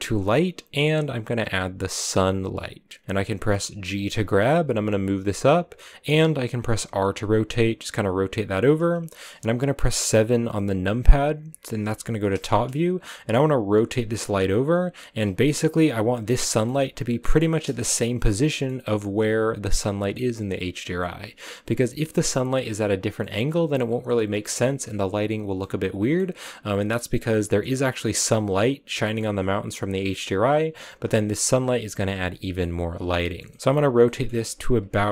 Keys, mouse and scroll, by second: 3.9 g, 8.6 r, 11.3 KP_7, 12.3 scroll down 1, 12.3 shift+middle click, 12.9-13.2 scroll down 1, 13.3 r, 15.0-17.8 middle drag, 17.8-18.5 scroll up 2, 18.5-19.9 middle drag, 19.9 scroll down 3, 20.1-21.9 middle drag, 21.9 r, 23.2-24.4 middle drag, 24.4 r, 25.6-28.2 middle drag, 28.2-28.8 scroll up 4, 28.8 scroll down 3, 29.0 middle click, 29.2 r, 30.1 scroll down 1, 30.2 middle click, 30.8 scroll up 1, 30.9 r, 31.9 g, 32.2 r, 32.6 middle click, 33.6 r, 34.1 middle click, 34.4 r, 34.9-35.1 middle drag.